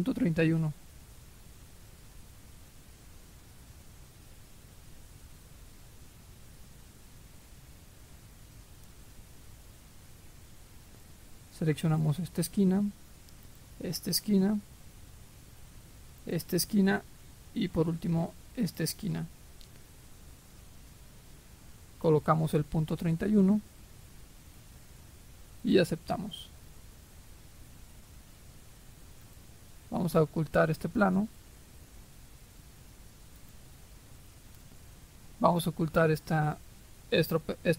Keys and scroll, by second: 22.9-23.7 typing.